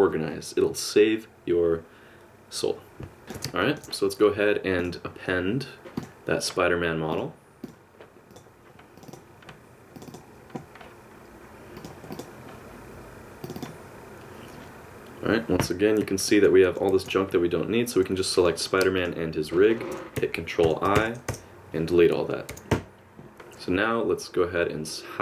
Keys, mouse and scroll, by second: 3.2 middle click, 3.6 shift+scroll down 1, 3.6 shift+middle click, 4.8 click, 15.6 KP_Decimal, 16.3 middle click, 16.9 alt+a, 18.4 click, 19.0 shift+click, 20.6 ctrl+i, 21.0 x, 22.5 a, 22.7 KP_Decimal, 23.3 alt+h, 23.3 g.